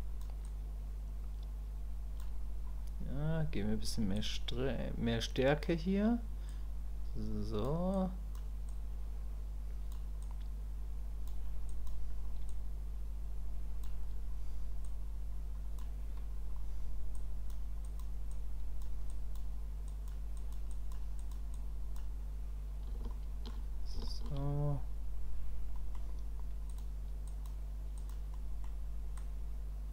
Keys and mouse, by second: 0.4-2.2 drag, 4.2-5.6 drag, 6.5-7.6 drag, 7.9 click, 8.7-9.9 drag, 10.2-11.3 drag, 11.7 click, 12.5-13.8 drag, 14.8 click, 17.1 click, 17.8 click, 18.3 click, 19.1 click, 19.9 click, 20.4 click, 20.7 click, 21.2 click, 21.5 click, 23.1 shift+click, 24.1 shift+click, 25.7 middle click, 26.7 click, 27.3 click, 28.0 click, 28.3 middle click, 29.2 click.